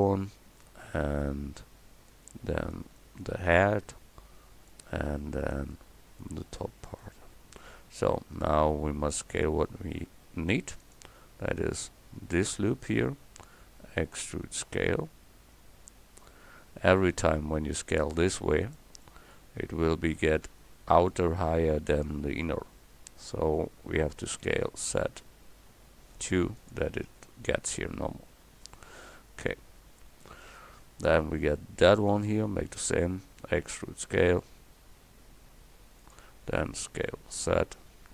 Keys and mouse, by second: 2.3 e, 4.7 click, 5.0 e, 6.2 click, 8.0 middle click, 8.7-10.8 middle drag, 10.8-12.4 drag, 14.0 e, 19.1-20.1 middle drag, 24.4 s, 27.7 middle click, 29.1 KP_1, 29.7 middle click, 32.0 click, 33.5 e, 36.6 s.